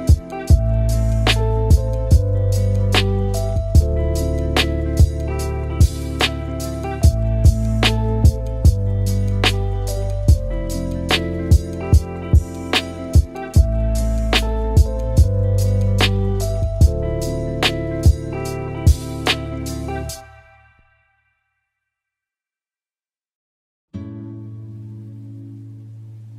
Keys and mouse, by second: 1.0 shift+middle click, 2.3 shift+a, 5.9-6.5 drag, 6.7 middle click, 7.1 shift+a, 10.1-10.7 drag, 11.3-11.8 middle drag, 12.2 shift+a, 13.0 p, 14.5-15.0 drag, 15.4 shift+a, 18.2-18.8 drag, 19.7-20.8 drag, 22.3 shift+middle click, 22.9-24.3 drag, 25.2 middle click.